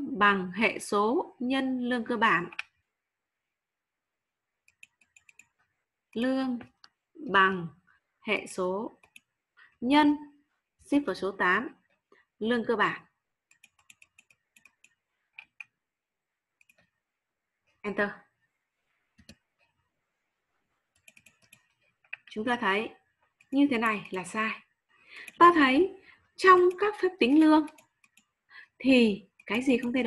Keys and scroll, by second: 10.7 shift+8.